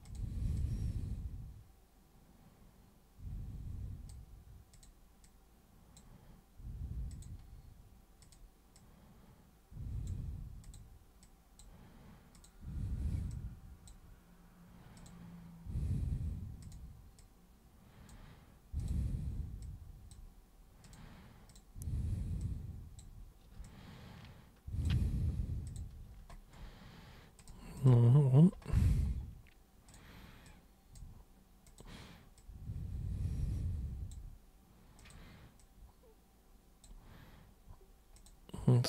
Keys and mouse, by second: 0.1 super+click, 0.6-4.1 super+drag, 4.7 super+click, 5.2-6.0 super+drag, 7.2 super+click, 8.2 super+click, 8.7-10.1 super+drag, 10.6 super+click, 11.3 super+click, 12.3 super+click, 13.3 super+click, 15.0 super+click, 16.7 super+click, 17.2 super+click, 18.8 super+click, 19.6 super+click, 20.8 super+click, 21.5 super+click, 22.4 super+click, 23.6-24.9 alt+super+drag, 25.7 super+click, 27.4 super+click, 27.8 super+click, 29.9 super+click, 30.5 super+click, 31.7 super+click, 32.4 super+click, 35.0 super+click, 35.6 super+click, 38.2 super+click.